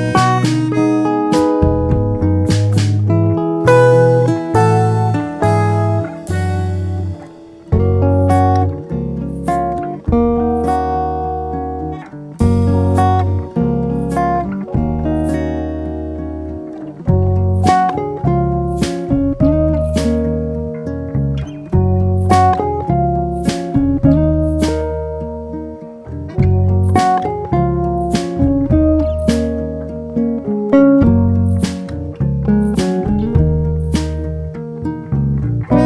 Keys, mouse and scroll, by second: 2.5 a, 4.3-7.4 drag, 12.0 click, 12.8-14.1 drag, 15.2-18.0 drag, 20.6 click, 21.9 click, 24.6 click, 25.4-26.2 drag, 27.1 click, 27.6-28.8 drag, 29.9-31.6 drag, 32.1 n, 34.2 click.